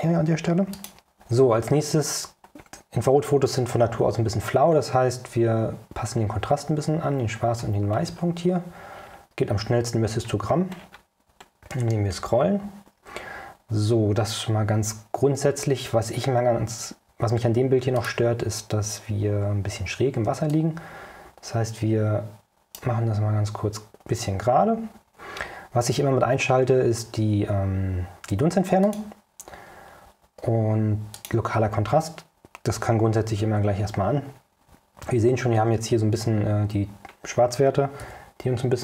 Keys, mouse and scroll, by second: 0.8 click, 4.9-5.2 scroll up 2, 6.4 scroll up 2, 7.4-7.8 scroll down 2, 8.1 scroll down 2, 9.1-9.4 scroll down 2, 10.1-10.5 scroll down 2, 10.9 scroll down 2, 11.6-12.1 scroll down 2, 18.1 click, 20.6-23.1 right drag, 28.9 click, 31.3 click, 38.1 o.